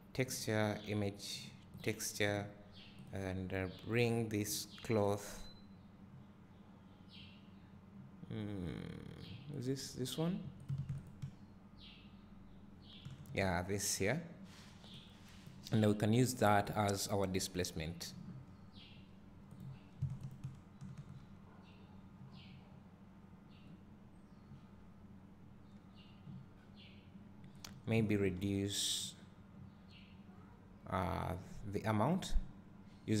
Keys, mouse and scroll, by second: 0.0 click, 3.0 click, 9.9-11.0 drag, 11.8 ctrl+shift+click, 15.3 click, 16.9-20.1 drag, 20.8 ctrl+shift+click, 26.4 scroll up 1.